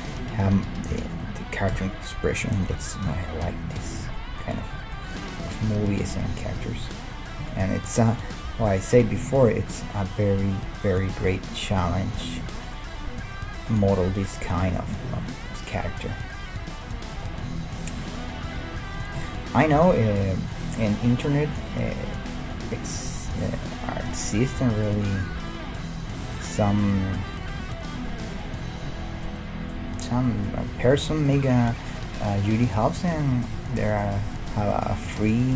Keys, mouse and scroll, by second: 0.9 l, 1.7 KP_1, 2.7 g, 4.9-6.7 middle drag, 6.9-9.4 right drag, 8.6 e, 9.3 s, 11.2 s, 12.4-14.3 middle drag, 14.3 click, 14.7-17.5 middle drag, 14.7-17.1 right drag, 16.4 g, 17.8-19.2 right drag, 18.5 g, 21.1 s, 22.4 middle click, 22.5 right click, 23.3 KP_1, 24.5-25.9 middle drag, 24.6 g, 26.1-29.3 right drag, 26.3 g, 27.6 g, 28.6-31.1 middle drag, 30.1-31.1 right drag, 30.6 g, 31.6 g, 32.0 click, 32.6 g, 34.0 click, 35.1 g.